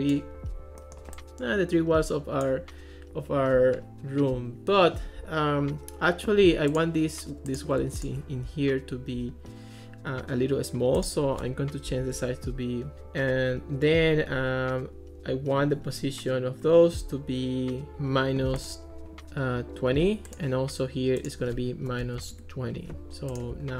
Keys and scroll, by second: 11.7-12.7 typing, 12.9 Return, 21.9 -, 22.2 0, 22.3 Return, 23.4 Return.